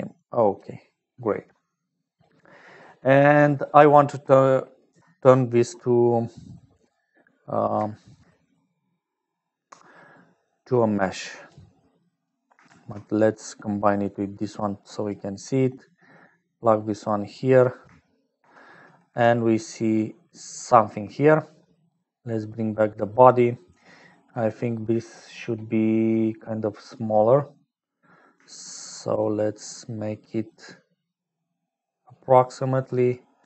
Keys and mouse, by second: 0.0-33.4 typing, 0.1 click, 1.4 click, 2.3 click, 4.8 Escape, 10.3 click, 11.2 click, 12.0 click, 12.4 click, 16.3-17.9 drag, 18.1 shift+click, 22.4-24.0 drag, 23.9 middle click, 29.4-32.8 shift+drag.